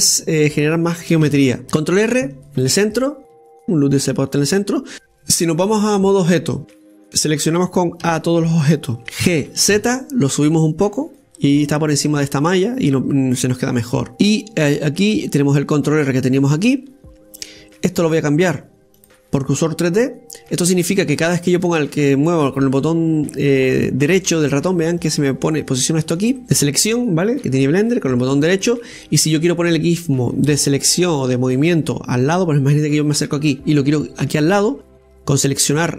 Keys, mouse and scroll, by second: 0.4 scroll up 1, 1.1-1.6 scroll down 2, 1.6 Tab, 3.8 ctrl+r, 3.8-4.9 middle drag, 7.5 scroll down 2, 7.7-8.9 middle drag, 8.9 a, 12.4-14.1 middle drag, 14.1 right click, 14.5 Tab, 15.0 scroll up 2, 15.7-18.6 middle drag, 18.9-21.9 drag, 22.4 right click, 23.4 click, 25.3 click, 25.9 click, 27.7 click, 28.2 click, 28.7 click, 29.1 click, 33.8-34.3 scroll up 5, 34.8 click.